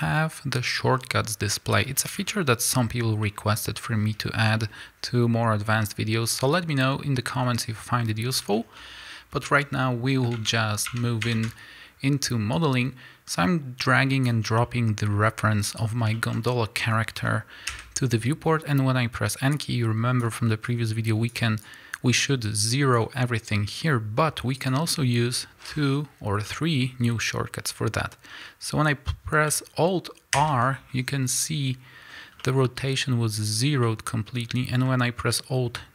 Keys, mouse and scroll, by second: 4.2 scroll up 2, 8.2 scroll down 1, 8.4-12.1 shift+scroll up 2, 8.5 shift+middle click, 14.6 middle click, 15.2 scroll up 1, 15.7 click, 16.1 shift+middle click, 17.7 n, 19.5-24.7 drag, 26.5 middle click, 27.0-35.9 middle drag, 30.3 alt+r.